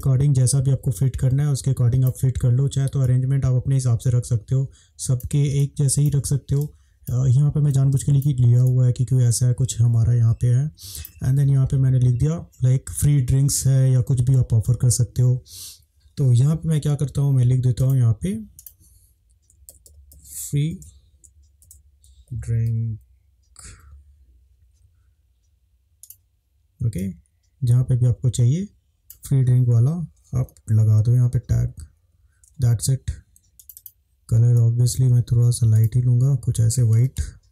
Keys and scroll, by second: 5.6 space, 6.6 space, 8.0 space, 8.6 space, 19.5-22.2 typing, 23.7 k, 30.6 Up, 34.3 Up, 37.1 Right.